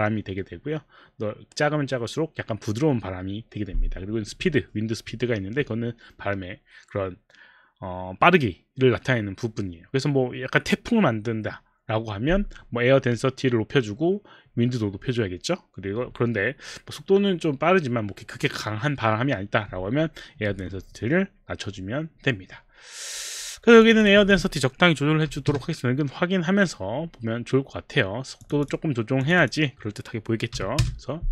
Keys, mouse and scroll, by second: 23.8 click, 24.0 click, 25.2 KP_5, 26.2 KP_5, 28.4 click, 28.6 click, 29.6 click, 30.6 KP_5, 30.8 Return.